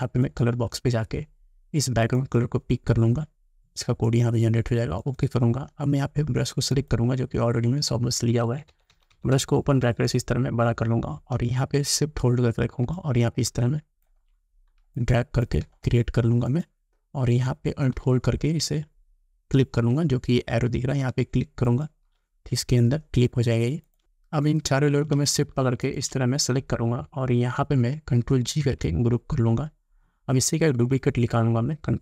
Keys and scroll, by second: 8.5 ], 15.0 space, 28.5 ctrl+g.